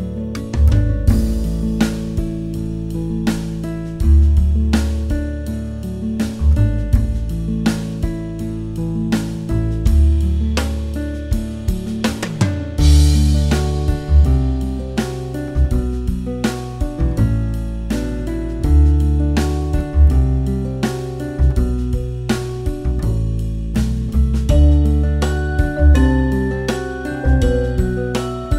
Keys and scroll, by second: 1.6 space, 6.5 space, 7.7 space, 9.4 space, 15.5 space, 15.9 space, 18.3 space, 21.7 super+z, 23.7 space, 26.4 space, 27.4-28.5 typing.